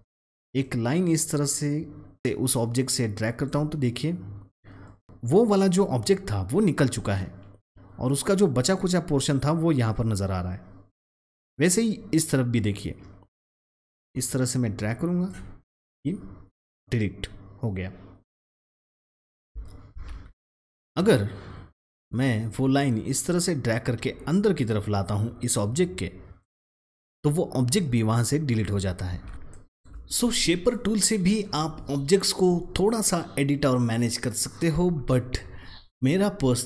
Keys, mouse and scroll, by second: 0.5-3.4 drag, 13.3-15.2 drag, 19.9 ctrl+z, 22.4-26.3 drag, 29.0 ctrl+z, 29.3 space, 29.4 click, 29.7 space.